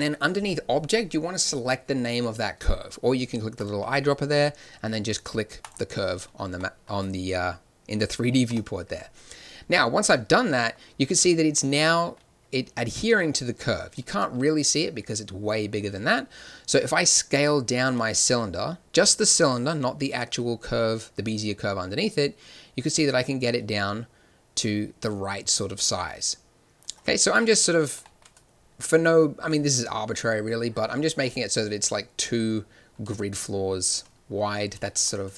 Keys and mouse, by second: 3.5-5.5 drag, 6.1-8.4 middle drag, 8.4 KP_7, 13.1 z, 13.8 z, 17.8 s, 27.4-33.9 drag, 33.0 z, 33.9 z.